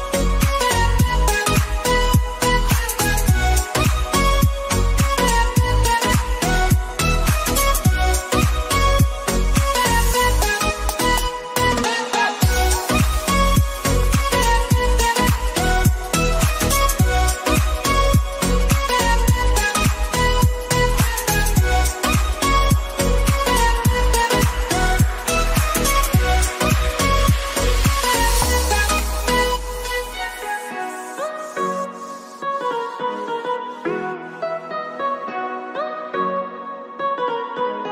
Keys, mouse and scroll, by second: 0.6 click, 1.9-4.1 alt+drag, 4.8 click, 5.8 click, 6.1-7.8 drag, 7.8 typing, 8.4 Return, 10.9 click, 11.6-12.7 typing, 13.5-15.1 drag, 17.9 ctrl+a, 19.1 click, 21.5-29.0 typing, 30.1 click, 33.6 click, 35.8 click.